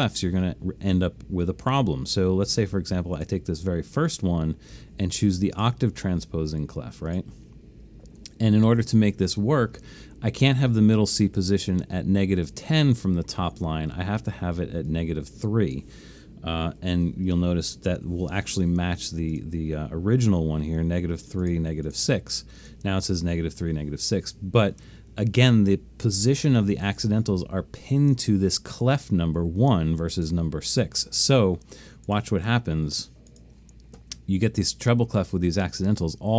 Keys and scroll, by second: 16.8 3, 17.3 Tab.